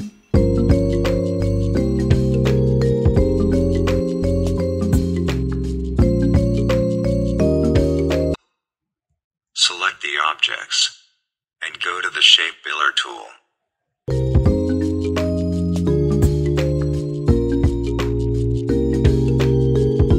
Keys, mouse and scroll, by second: 0.1 ctrl+shift+[, 0.3 ctrl+shift+], 2.1-3.5 drag, 4.8-8.1 drag, 8.4 click, 10.3-11.5 drag, 12.7-14.6 alt+drag, 15.6-20.1 drag.